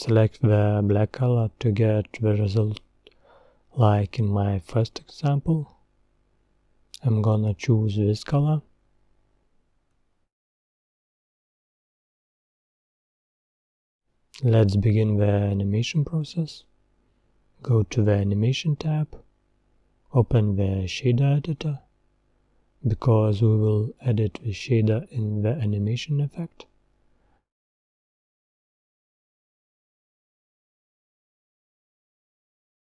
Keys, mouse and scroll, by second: 2.1 click, 8.3 scroll down 1, 8.4-9.0 middle drag, 9.0 scroll down 3, 9.2-9.6 middle drag, 9.6 scroll up 4, 9.9-12.1 middle drag, 12.1 click, 12.9 scroll down 2, 13.1-13.9 middle drag, 13.9 scroll down 3, 14.2-14.6 middle drag, 14.6-15.2 scroll up 7, 15.2-15.8 middle drag, 15.8-17.5 scroll down 2, 17.5-17.9 scroll down 1, 17.9 click, 22.9-27.7 drag, 27.7-29.2 scroll up 2, 29.2 click, 30.0-30.4 scroll up 6, 30.6-31.3 middle drag, 31.3-32.0 scroll up 4, 32.0-32.5 scroll down 3, 32.5-32.9 middle drag.